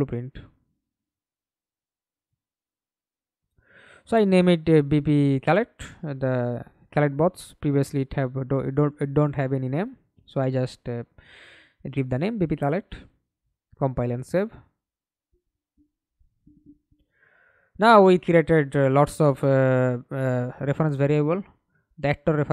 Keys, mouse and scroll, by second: 0.5-3.6 typing, 3.8 Left, 4.0 Left, 4.1 Left, 4.5 Left, 4.7 Left, 4.8 Left, 5.0 Left, 5.2 Left, 5.7-6.8 typing, 7.2 Return, 8.3-8.7 scroll down 2, 8.8 right click, 9.3 right click, 9.9 scroll up 2, 10.2 right click, 10.9 right click, 11.5-12.4 scroll up 2, 16.3 right click, 19.6 double click, 20.9 right click, 21.7-22.5 scroll up 2.